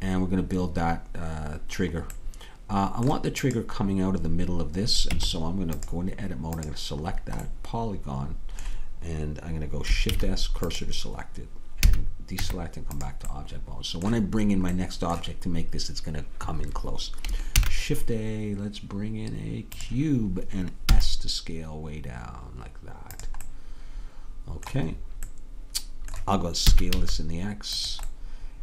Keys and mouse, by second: 5.2 Tab, 10.1 shift+s, 11.9 a, 12.5 Tab, 17.6 shift+a, 21.0 s, 24.6-26.7 middle drag, 26.7 s.